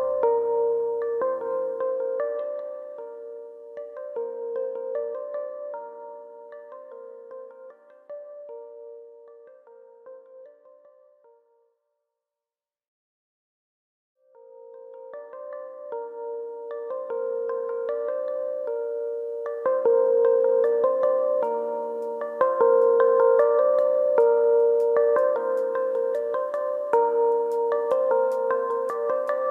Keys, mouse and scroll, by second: 7.5 click, 8.2-8.6 scroll down 1, 8.6 middle click, 10.3 KP_3, 11.5 Tab, 12.3 alt+click, 16.7 middle click, 17.1 Tab, 17.3 middle click, 17.5 Tab, 18.1 click, 18.8 ctrl+KP_Add, 19.3-20.0 scroll up 5, 19.8 shift+middle click, 21.0 click, 22.1 i, 23.1 click, 23.3 right click, 25.9 click, 26.6 click, 29.1-29.5 scroll down 1.